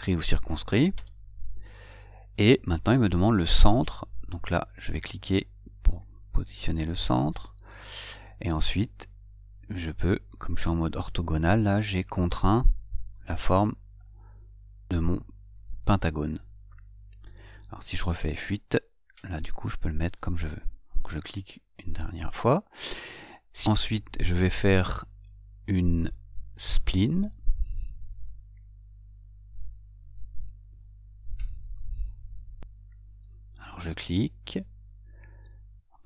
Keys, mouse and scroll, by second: 6.2 click, 19.1 F8, 21.7 click, 30.7 click, 34.0 click.